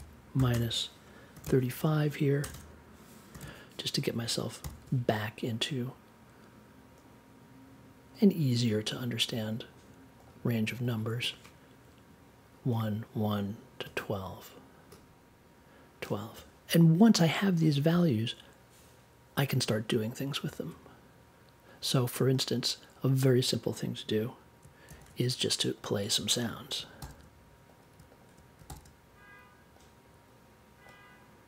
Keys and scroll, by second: 0.3 -, 0.5 space, 1.3 2, 2.4 BackSpace, 3.3 3, 4.6 super+j, 24.8 super+x, 26.9 super+v, 28.6 super+v.